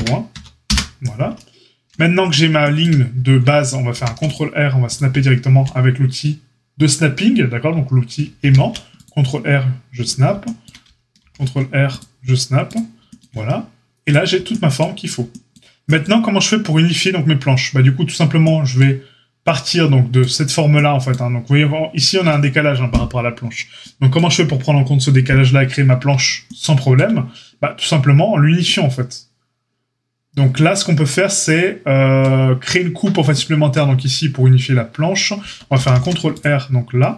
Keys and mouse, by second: 3.9 ctrl+r, 8.3 ctrl+r, 11.1 ctrl+r, 14.0-37.1 drag, 35.7 ctrl+r.